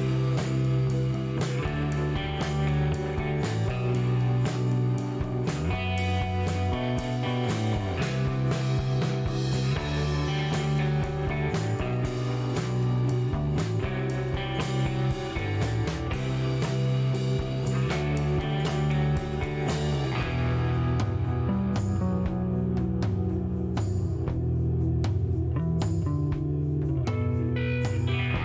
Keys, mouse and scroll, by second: 1.3 shift+middle click, 1.9 shift+right click, 3.1 shift+right click, 5.0 shift+middle click, 5.4 shift+right click, 5.9 shift+middle click, 6.5 shift+right click, 8.9 click, 9.6 click, 10.9 shift+right click, 12.4 shift+scroll down 1, 13.1 shift+right click, 15.7 middle click, 16.9 shift+right click.